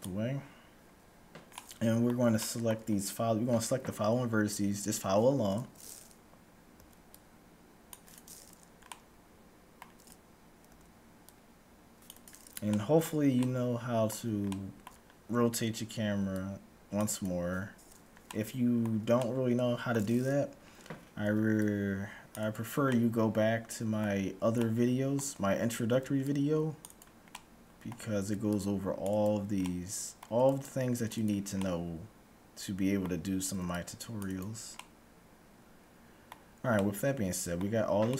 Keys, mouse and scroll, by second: 1.3-6.0 middle drag, 4.2-4.7 scroll up 1, 6.8 c, 8.3-10.7 middle drag, 10.7 c, 12.8-16.8 middle drag, 16.0 c, 16.5-16.8 scroll up 1, 17.8-18.2 scroll down 1, 18.2-20.8 middle drag, 21.3 c, 22.8-26.3 middle drag, 26.0 c, 27.2-29.2 middle drag, 28.2 c, 29.7-31.3 middle drag, 30.3 c, 31.7-33.3 middle drag, 33.3 c, 34.8-36.7 middle drag, 36.8-38.1 middle drag.